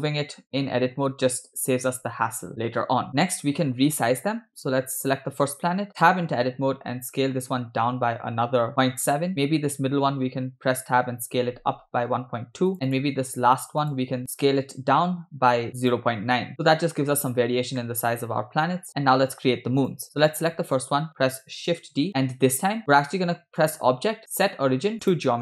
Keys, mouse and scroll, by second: 3.1 scroll down 2, 3.1 shift+middle click, 4.7 Tab, 6.6 s, 9.5 Tab, 9.5 click, 10.6 Tab, 11.3 s, 13.0 click, 13.6 Tab, 13.9 drag, 14.2 Tab, 14.7 s, 16.6 Tab, 17.9 shift+middle click, 18.2 scroll up 3, 18.9 scroll down 2, 19.8 click, 22.0 shift+d, 23.8-25.3 drag.